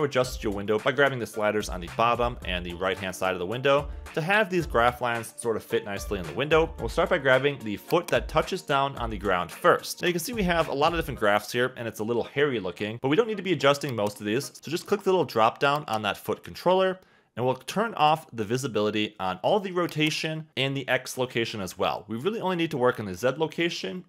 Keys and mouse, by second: 1.5-2.5 drag, 4.1 n, 5.4 click, 8.0 click, 9.3 KP_1, 9.3 g, 9.3 y, 9.6 z, 10.9 Escape, 11.3 x, 14.1 click, 15.8 click, 19.8 click, 22.2 click, 22.9 click.